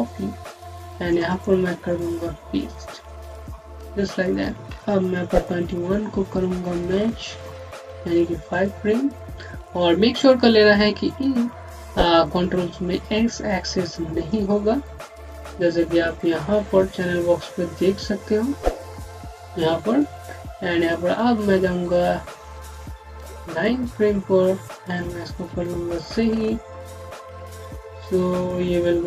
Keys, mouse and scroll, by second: 1.1 right click, 2.8 click, 5.2 typing, 6.6 typing, 7.5 scroll up 1, 8.4 click, 20.2-21.0 scroll down 1, 21.0 ., 23.3 click.